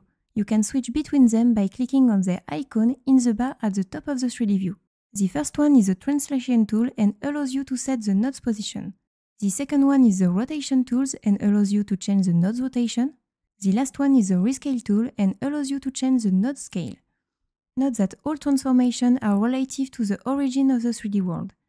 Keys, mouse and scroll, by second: 6.2 click, 9.8 click, 14.4 click.